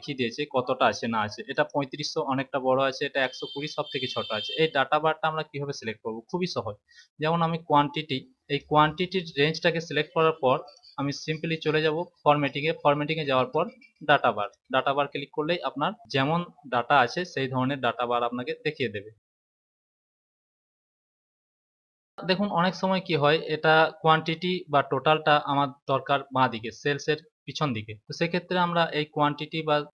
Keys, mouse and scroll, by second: 1.4 click, 3.1 click, 6.9 click, 10.5 click, 14.3 click, 16.0 click, 22.1 click.